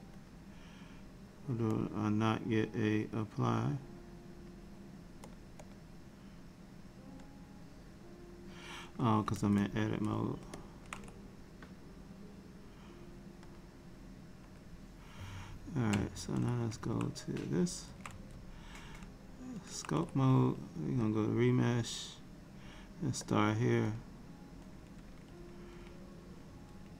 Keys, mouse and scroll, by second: 0.3 click, 1.8 click, 3.5 click, 5.3 click, 5.7 click, 7.4 click, 9.6 ctrl+Tab, 13.6 click, 16.8 Tab, 18.0 Tab, 21.1 click.